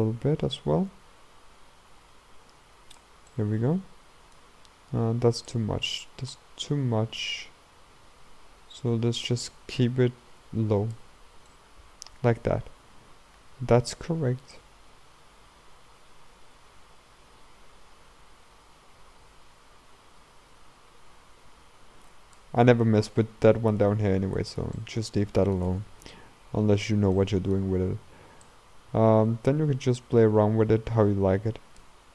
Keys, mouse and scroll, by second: 3.3-5.9 middle drag, 5.9-8.8 drag, 11.2-11.5 scroll down 2, 11.5-14.7 middle drag, 14.7-17.6 drag, 23.8 ctrl+z, 24.8-28.5 middle drag, 28.5-31.5 drag.